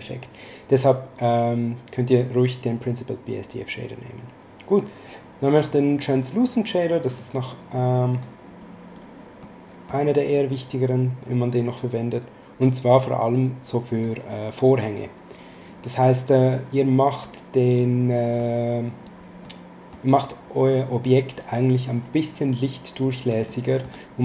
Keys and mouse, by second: 7.1 click, 9.4 middle click, 10.4 click, 13.3 click, 19.4 middle click, 23.4 middle click.